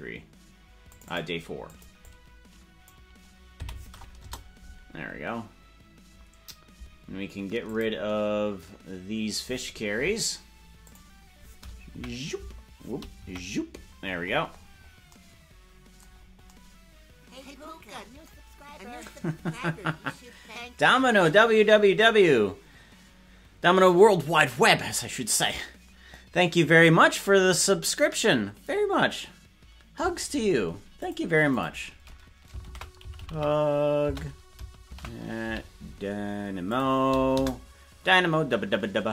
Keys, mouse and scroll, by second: 0.8 click, 1.1-4.6 drag, 8.1 click, 10.8 click, 11.8 KP_Decimal, 13.1 KP_Decimal, 13.9-14.8 scroll down 11, 16.1-16.5 scroll down 4.